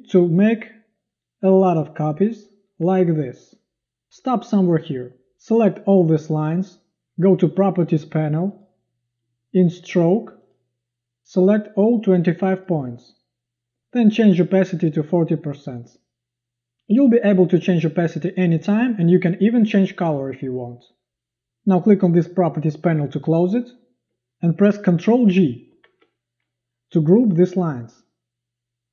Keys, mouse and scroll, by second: 25.8 ctrl+g.